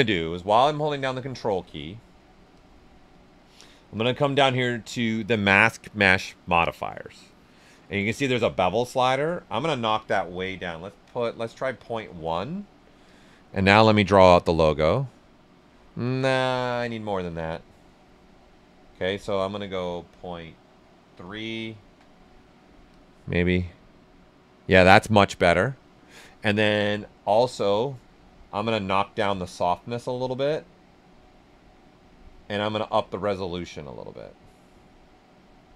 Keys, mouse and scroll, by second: 0.9-3.9 ctrl+drag, 3.9-8.9 ctrl+drag, 10.3 ctrl+., 10.9 ctrl+1, 12.0 ctrl+Return, 13.0 ctrl+click, 13.6 ctrl+space, 15.8 ctrl+z, 16.9 ctrl+click, 20.1 ctrl+-, 21.1 ctrl+3, 21.8 ctrl+Return, 22.8-25.9 ctrl+drag, 25.6 typing, 27.1-29.4 ctrl+drag, 27.1 typing, 29.4-32.8 ctrl+drag, 32.8-35.7 ctrl+drag.